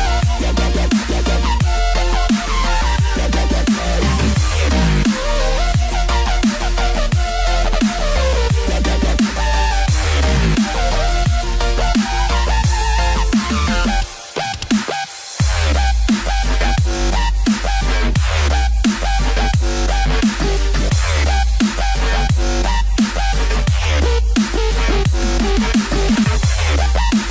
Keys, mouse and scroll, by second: 0.4 click, 1.1 scroll down 1, 2.3 middle click, 5.0 click, 6.9 click, 10.7 click, 11.4 click, 14.4 click, 18.0 click, 18.0 middle click, 20.3 middle click, 20.3 scroll down 3, 20.6 middle click, 24.0 scroll up 3, 26.2 middle click.